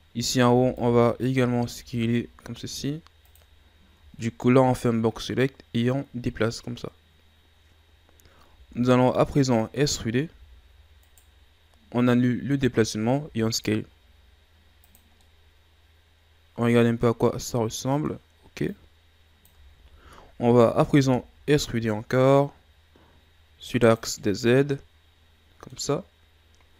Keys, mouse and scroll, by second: 0.2 right click, 0.5 b, 4.2-7.2 scroll up 1, 8.9-9.4 shift+scroll up 1, 9.4-10.3 scroll up 1, 10.3 e, 15.2-18.2 middle drag, 18.7-19.7 drag, 19.7 ctrl+z, 21.0 e, 24.2-26.2 middle drag, 26.2-26.7 scroll up 1.